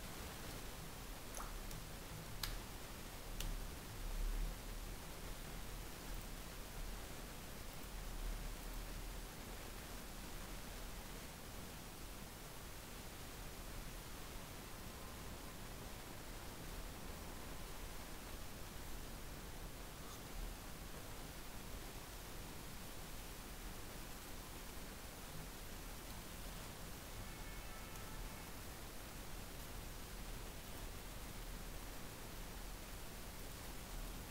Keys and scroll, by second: 4.5 ctrl+s, 4.9 alt+Tab, 9.0 alt+Tab, 20.8 ctrl+shift+Left, 22.6 ctrl+x, 22.9 ctrl+Left, 25.5 ctrl+v, 26.8 ctrl+Left, 28.2 ctrl+s, 29.3 alt+Tab.